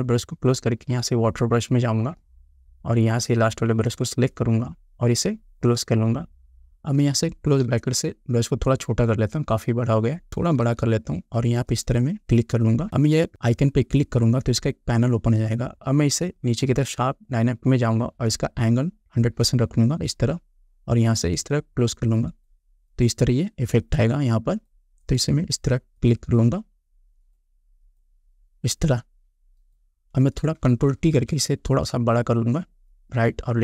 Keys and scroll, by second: 7.9 [, 10.6 ], 31.3 ctrl+t.